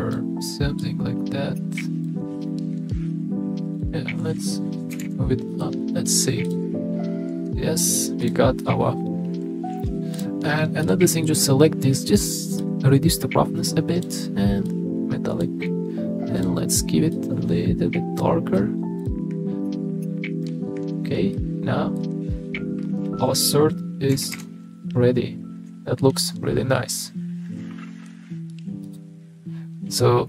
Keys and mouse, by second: 3.8 drag, 4.9 g, 5.0 z, 6.4 click, 8.2 click, 10.1 click, 12.6-14.1 drag, 14.8 click, 19.0 click, 20.4 KP_0, 21.3 click, 21.6 middle click, 23.0 click, 24.1 r, 24.3 r.